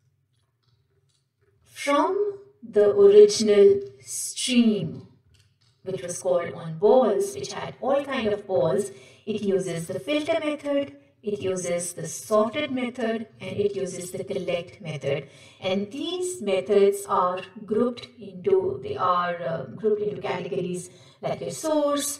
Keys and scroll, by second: 5.6 ctrl+shift+Left, 12.2 ctrl+shift+Right.